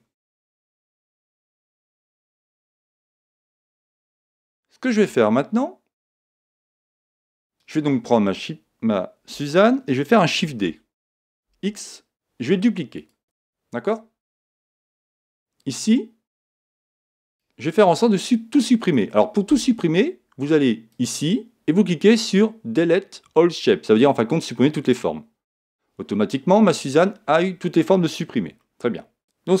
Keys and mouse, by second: 4.0-7.6 middle drag, 7.6-9.5 right drag, 11.4 shift+d, 13.1 click, 16.6 click, 17.3-19.1 right drag, 20.9 click, 28.6 middle click.